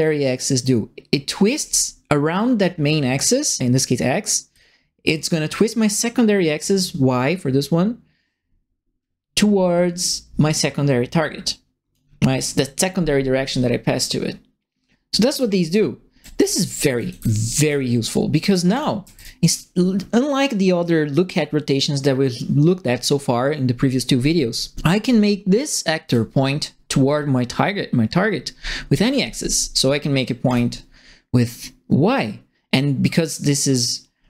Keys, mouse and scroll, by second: 4.5-11.9 drag, 15.0-18.0 right drag, 15.3-19.5 typing, 18.6 right click, 26.0 click, 29.1 click, 30.4 click.